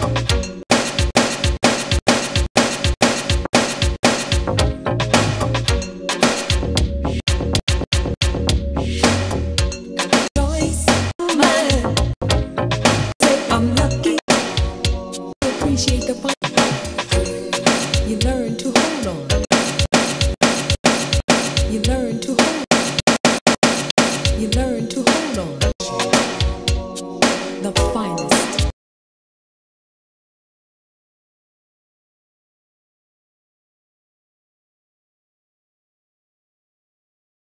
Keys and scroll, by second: 0.6 3, 7.2 3, 10.2 3, 14.3 3, 15.3 3, 19.4 3, 22.6 3, 25.7 3, 28.7 space.